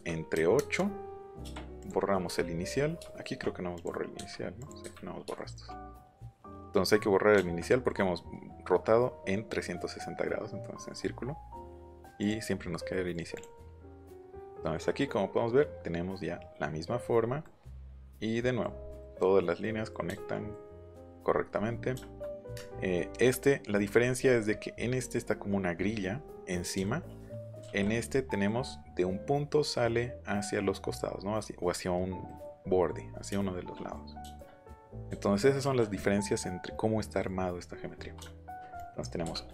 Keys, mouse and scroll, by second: 0.3 KP_8, 0.5 KP_Enter, 1.8 click, 3.7 click, 4.1 Delete, 4.8 Delete, 12.2 click, 12.9 middle click, 13.3 click, 17.0 scroll up 2, 17.8-18.1 scroll up 4, 21.1 scroll down 2, 21.3 middle click, 27.5 ctrl+b, 32.2 middle click, 32.6-33.9 middle drag, 38.7 click, 39.2 m.